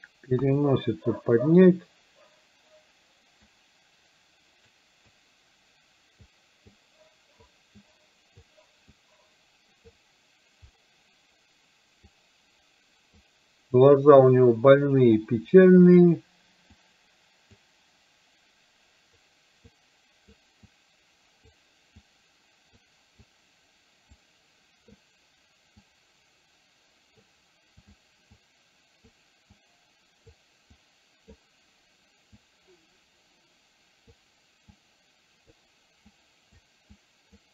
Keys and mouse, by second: 0.4 KP_1, 3.5-4.8 drag, 5.2-6.3 drag, 6.8 click, 7.9 click, 9.0-10.0 drag, 12.2-13.2 drag, 15.3 click, 16.8 click, 19.8 click, 20.8 click, 22.2 click, 23.2-24.2 drag, 25.9-27.3 drag, 27.8 click, 28.4 click, 29.7 click, 30.8 click, 32.4-34.3 drag, 34.8 click, 36.2 click, 37.0 click.